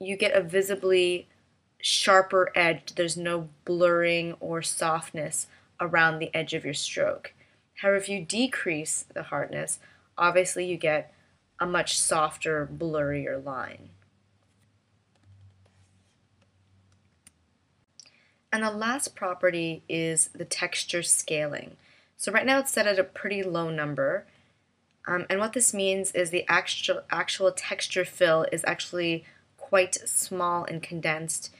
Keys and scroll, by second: 15.3 v, 17.1 BackSpace.